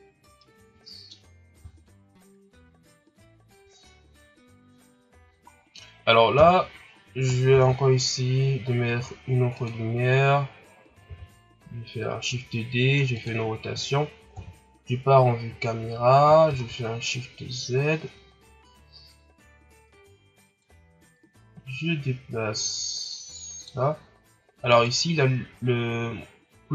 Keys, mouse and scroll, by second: 0.1 scroll down 3, 0.3-5.5 middle drag, 5.5 scroll down 3, 6.3 KP_7, 7.4 shift+d, 11.0 r, 14.3 KP_0, 15.4-16.0 scroll up 1, 16.0-16.7 scroll up 1, 16.7 shift+z, 20.5-23.6 drag, 24.6 right click.